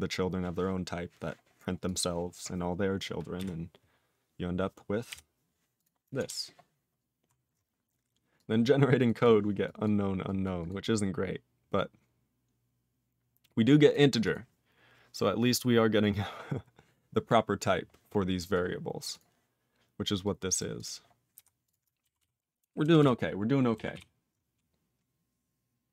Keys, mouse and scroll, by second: 1.8 click, 1.9 click, 21.3 q, 21.7 click, 22.2 ctrl+s, 23.0 ctrl+s, 23.9 ctrl+s.